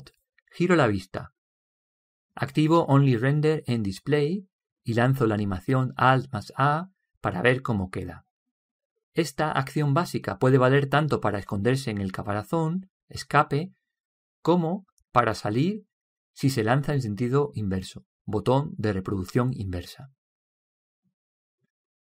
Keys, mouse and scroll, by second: 1.6 middle click, 1.8 middle click, 2.0 middle click, 2.6-4.7 middle drag, 5.0-6.9 drag, 5.8 alt+a, 6.8 alt+a, 13.1 Escape, 14.1 Escape, 20.4-22.1 drag.